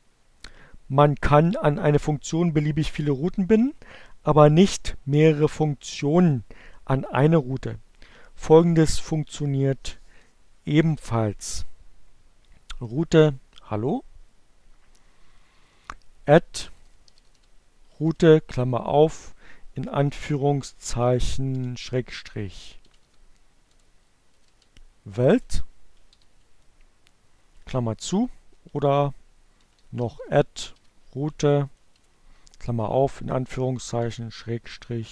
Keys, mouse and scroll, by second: 11.2 click, 11.7 Return, 13.9 alt+q, 14.1-16.5 typing, 19.1 shift+7, 19.4 e, 21.8 BackSpace, 23.0 t, 24.2 shift+9, 24.5 Return, 26.8-27.7 typing, 29.2 shift+9, 29.3 BackSpace, 31.9 shift+7, 32.2 h, 33.3-35.1 typing.